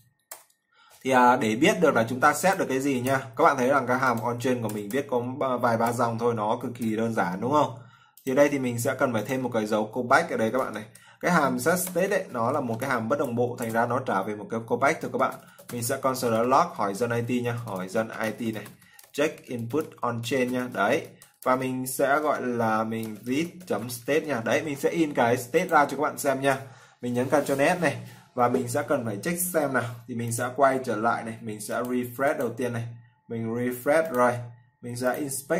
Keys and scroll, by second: 26.1 ctrl+s.